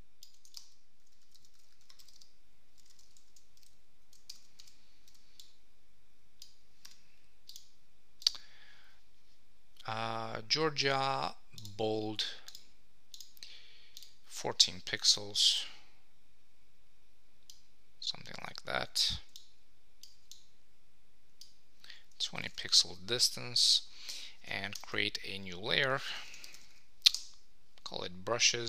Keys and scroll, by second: 3.0 shift+t, 3.5 shift++, 4.3 super+Return, 22.3 Up, 22.5 super+s, 24.7 shift+super+n, 27.1 Return.